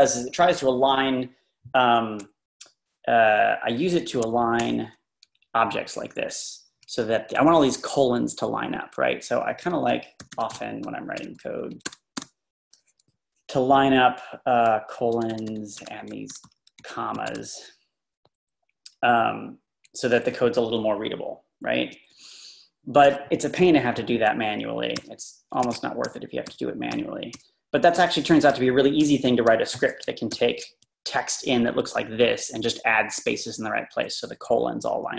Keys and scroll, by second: 4.0-4.7 typing, 5.3 Right, 5.4 Right, 5.6 Right, 5.7 Right, 5.8 Right, 6.0 Right, 6.1 Right, 6.8 Right, 6.8-7.2 typing, 6.9 Right, 7.7 Right, 9.3 Left, 9.8-12.2 typing, 13.2-15.0 Right, 15.0 Up, 16.0 Up, 18.6 space, 19.0 Left, 19.6 Left, 21.0 Left, 25.0 u, 25.6 Escape, 26.1 u, 26.9 u, 28.0 u, 29.4 typing, 30.3 ctrl+r.